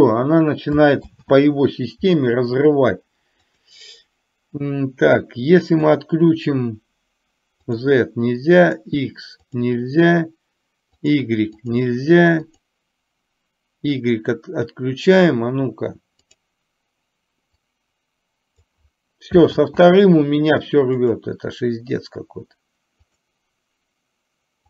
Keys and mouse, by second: 1.2 ctrl+z, 3.5 click, 8.7 click, 11.0 click, 11.8 click, 12.5 click, 16.4 click, 17.8-18.8 drag, 19.7 ctrl+z, 21.2 click, 23.2 click.